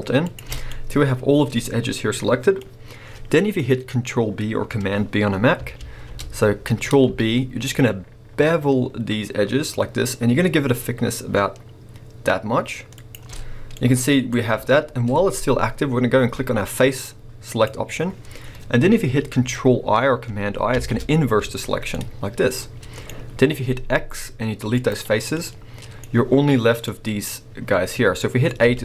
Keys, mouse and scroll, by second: 0.3 click, 0.5 scroll down 1, 0.7 middle click, 2.6 scroll up 1, 5.8 ctrl+b, 13.1 shift+click, 13.5 scroll down 1, 13.8 middle click, 14.3 scroll up 1, 17.5 click, 20.7 ctrl+i, 21.9-23.6 middle drag, 23.6 x, 25.3 middle click, 28.6 a.